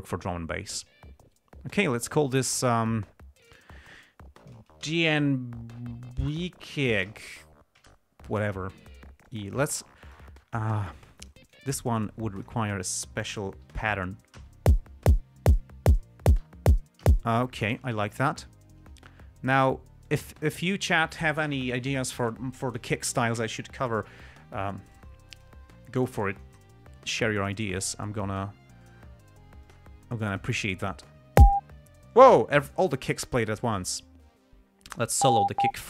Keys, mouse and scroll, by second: 2.0 click, 3.7 click, 5.1-7.9 typing, 8.1 Return, 9.6 click, 9.9 click, 10.4 click, 10.9 g, 11.5 ctrl+click, 12.7 click, 13.6 ], 14.7 l, 17.4 l, 17.8 space, 18.2 click, 19.3 click, 20.4-21.1 drag, 25.3 click, 26.5 g, 26.7 click, 29.2 click, 30.0 click, 30.6 click, 35.2 click.